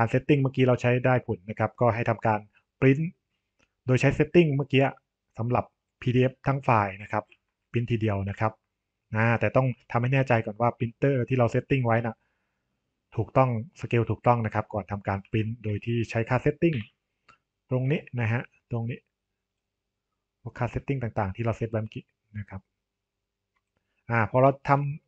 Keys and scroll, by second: 16.6 ctrl+p.